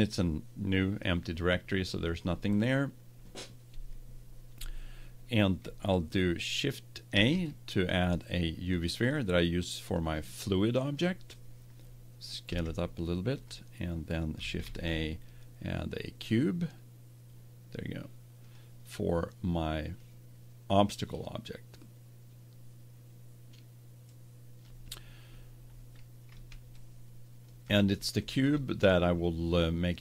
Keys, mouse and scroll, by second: 0.0-1.7 drag, 7.1 shift+a, 9.9-11.3 drag, 12.4 s, 13.4-15.2 drag, 14.6 shift+a, 19.9-21.8 drag, 26.7-30.0 middle drag.